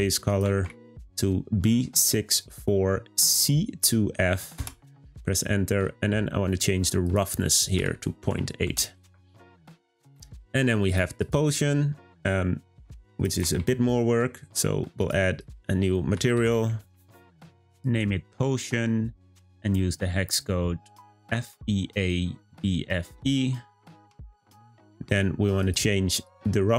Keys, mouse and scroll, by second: 7.0-9.7 drag, 10.8 click, 11.2 click, 15.0-18.4 drag, 18.4 scroll down 2, 19.2 click.